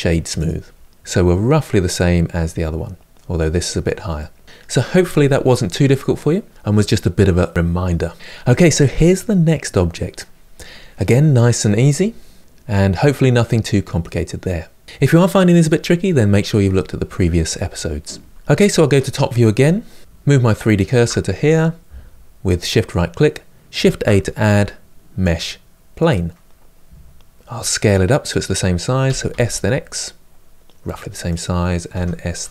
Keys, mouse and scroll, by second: 0.2-0.7 right drag, 0.7-8.1 middle drag, 8.1 KP_Decimal, 8.6-11.5 middle drag, 12.4-13.8 middle drag, 17.6-18.5 scroll down 1, 18.5 KP_7, 20.4 shift+right click, 25.7 shift+a, 28.8 s, 31.7 s.